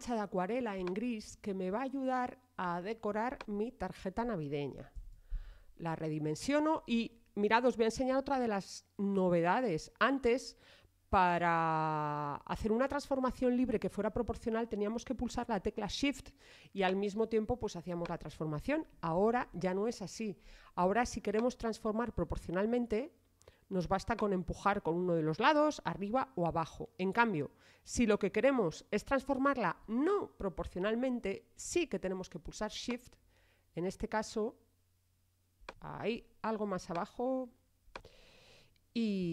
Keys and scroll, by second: 4.9 super+t, 20.2 super+z.